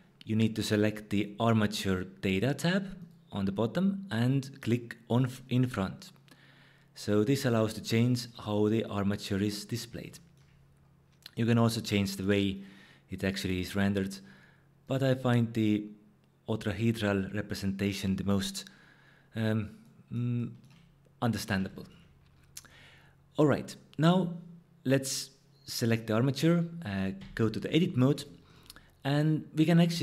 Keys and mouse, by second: 3.0 click, 5.1 click, 11.5-12.6 drag, 13.5-14.1 drag, 14.8-15.6 drag, 27.2 Tab.